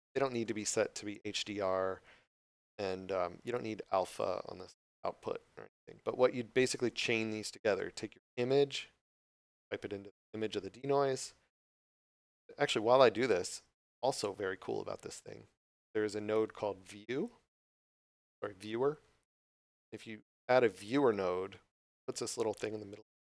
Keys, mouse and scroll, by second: 8.4 click, 13.1 click, 16.7 v.